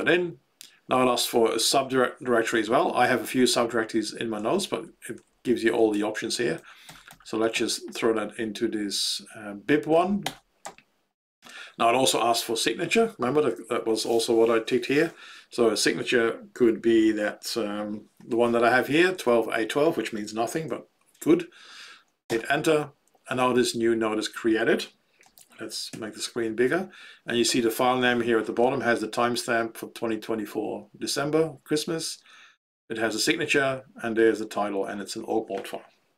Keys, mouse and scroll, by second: 4.3 Down, 4.6 Down, 4.8 Down, 5.0 Down, 5.4 Down, 5.6 Down, 5.9 Up, 6.1 Up, 6.3 Up, 6.5 Up, 6.8 Up, 7.0 Up, 7.5 Down, 10.2 Return.